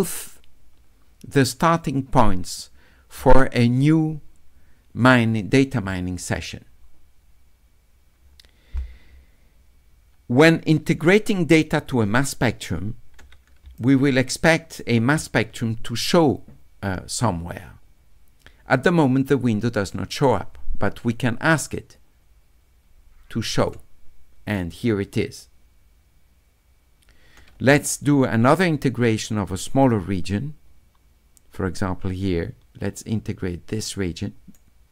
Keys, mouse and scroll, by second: 11.5 middle click, 13.6 s, 13.8-14.8 right drag, 21.4 click, 23.6 click, 29.5 s, 29.8-34.5 drag.